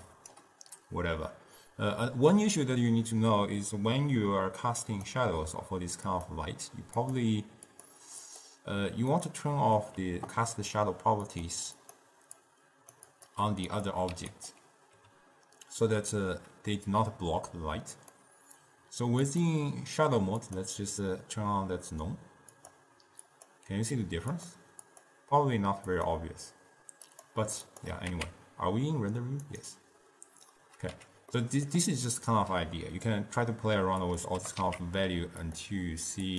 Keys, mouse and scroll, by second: 0.5 d, 5.0 click, 6.2 click, 7.2 click, 7.8 click, 8.4 click, 9.3 click, 11.4 click, 12.0-14.1 drag, 14.3 q, 15.1 n, 18.1 click, 19.4-22.5 drag, 22.7-26.3 drag, 27.2 click, 28.2 z, 31.1 n, 31.5-34.2 middle drag, 34.2 click, 34.6 g.